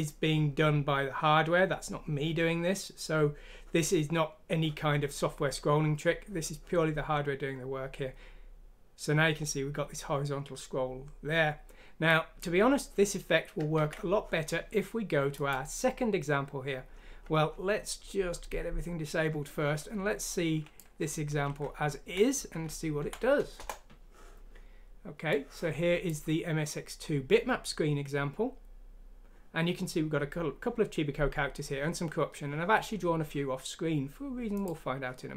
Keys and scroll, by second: 13.7 ctrl+z, 21.3 ctrl+q, 23.0 F6, 23.5 Return.